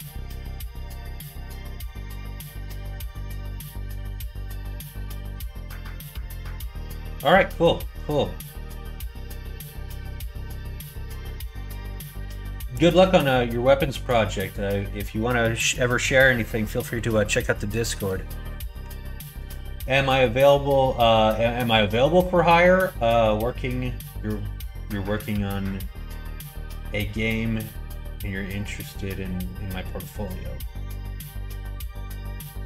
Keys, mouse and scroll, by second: 16.8 middle click, 17.2 middle click, 17.6 shift+middle click.